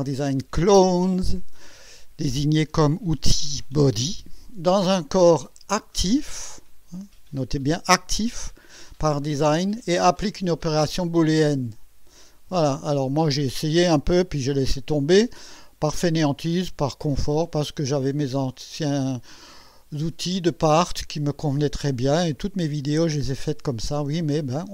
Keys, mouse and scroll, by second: 17.1 click.